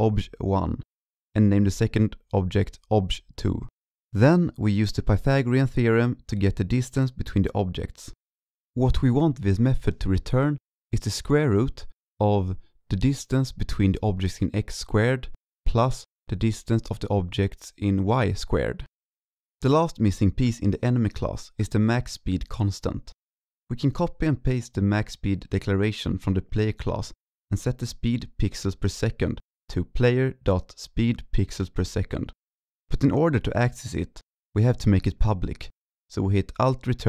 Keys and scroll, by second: 0.2 ctrl+shift+Left, 0.3 ctrl+shift+Left, 0.4 ctrl+shift+Left, 0.5 ctrl+shift+Right, 0.9 ctrl+c, 1.1 ctrl+Right, 1.2 ctrl+Right, 1.8 ctrl+v, 2.6 ctrl+s, 11.2 ctrl+shift+Left, 11.2 ctrl+shift+Left, 11.2 ctrl+shift+Left, 11.4 ctrl+shift+Left, 11.5 ctrl+c, 11.6 ctrl+Right, 12.2 ctrl+v, 12.3 ctrl+Left, 12.4 ctrl+Left, 12.4 ctrl+Left, 12.8 ctrl+Right, 12.8 ctrl+Right, 12.9 ctrl+Right, 13.0 ctrl+Left, 13.9 ctrl+Left, 14.7 ctrl+c, 14.7-15.1 ctrl+Right, 15.7 ctrl+v, 15.9-16.4 ctrl+Left, 16.7 ctrl+Right, 17.1 ctrl+Left, 18.2 ctrl+s, 19.7-20.1 ctrl+shift+Down, 20.3 ctrl+shift+Down, 21.2 ctrl+s, 21.6 ctrl+s, 26.5 ctrl+c, 27.0 ctrl+v, 31.0 ctrl+z, 31.2 ctrl+shift+Left, 31.3 ctrl+shift+Left, 31.6 ctrl+shift+Left, 31.7 ctrl+c, 32.0 ctrl+Right, 32.0 ctrl+Right, 32.1 ctrl+v, 34.8 alt+Return.